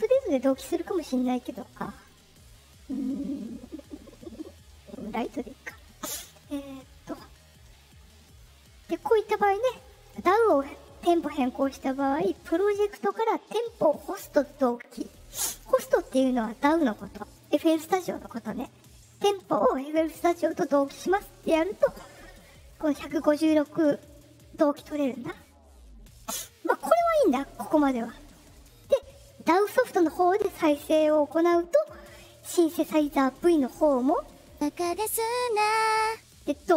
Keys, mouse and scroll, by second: 1.9 click, 4.9 click, 12.4 click, 24.8 click, 34.4 click, 36.1 click.